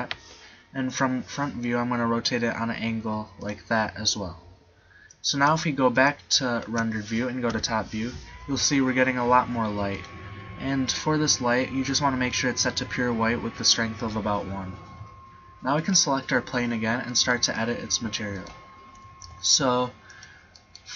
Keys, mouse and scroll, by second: 1.0 KP_1, 2.3 r, 6.8 shift+z, 7.6 KP_7, 19.0 right click, 19.2 g.